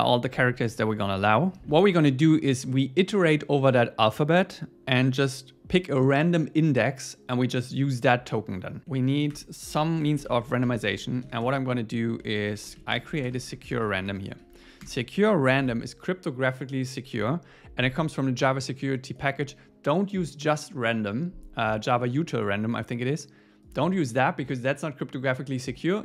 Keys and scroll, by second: 1.6 Down, 8.8 Up, 9.3 Return, 14.8 Return.